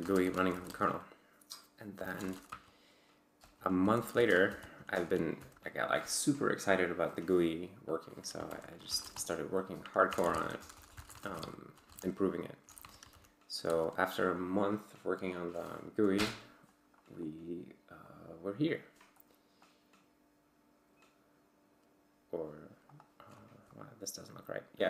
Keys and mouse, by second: 0.0-0.6 typing, 0.7 Return, 1.7-5.0 typing, 3.4 Return, 5.4 ctrl+l, 8.5 ctrl+u, 8.6-13.6 typing, 16.1 Return, 18.0 click, 19.2 click, 22.9 click, 23.7 click.